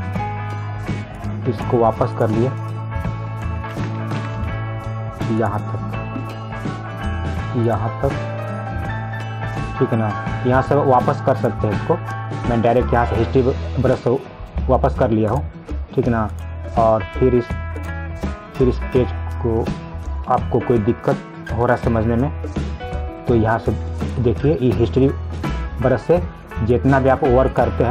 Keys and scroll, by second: 4.3 ctrl+alt+z.